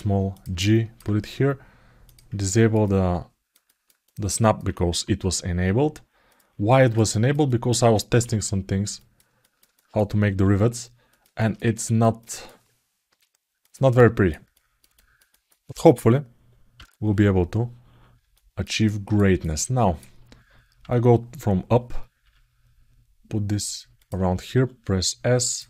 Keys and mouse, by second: 0.4 ctrl+alt+middle click, 1.8 click, 2.2 ctrl+alt+middle click, 2.6 alt+middle click, 3.4 ctrl+alt+middle click, 3.8 alt+middle click, 4.7 g, 6.5 ctrl+alt+middle click, 6.9 alt+middle click, 7.3 middle click, 8.0 g, 9.2 alt+middle click, 9.5 alt+shift+middle click, 11.2 alt+shift+middle click, 11.5 ctrl+alt+middle click, 12.0 alt+shift+middle click, 13.7 alt+shift+middle click, 14.3 alt+shift+middle click, 14.8 alt+shift+middle click, 15.1 alt+shift+middle click, 18.1 ctrl+alt+middle click, 18.6 ctrl+alt+middle click, 19.2 alt+middle click, 25.5 alt+shift+middle click.